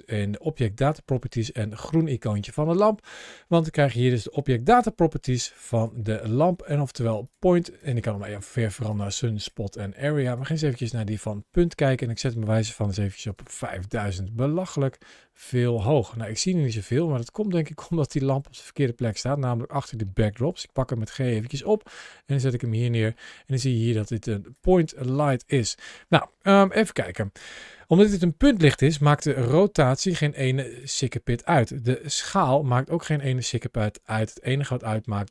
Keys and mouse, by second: 7.6 click, 8.7 click, 9.2 click, 10.0 click, 11.9-13.7 drag, 13.1 KP_0, 13.2 KP_0, 15.1 click, 15.9-16.6 middle drag, 17.2-18.0 middle drag, 20.3 g, 21.2 click, 21.7-22.3 middle drag, 22.8 g, 22.9 middle click, 24.2 g, 24.3 click, 24.7 g, 25.1 click, 25.5 middle click, 26.7 shift+middle click, 27.3 middle click, 28.9 r, 30.5 click, 31.9 s, 33.9 g.